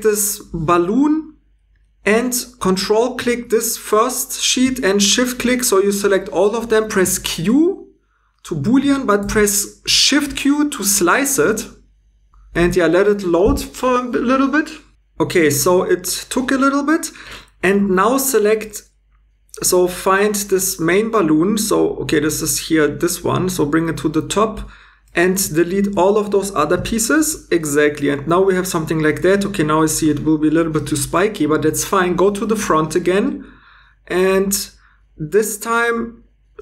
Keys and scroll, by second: 7.0 q, 9.2 shift+q, 26.8 x.